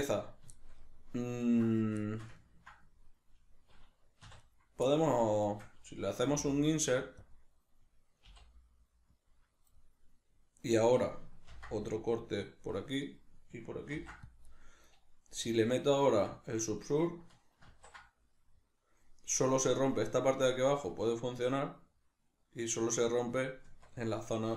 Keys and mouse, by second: 0.5-4.4 shift+middle drag, 4.3 3, 4.4 right click, 4.9 middle click, 5.5 shift+right click, 6.3 i, 7.3 click, 8.3 i, 9.3 click, 9.7-24.5 middle drag, 11.5 ctrl+r, 13.2 right click, 13.9 ctrl+r, 14.6 right click, 16.1 Tab, 17.9 ctrl+2, 23.7 Tab.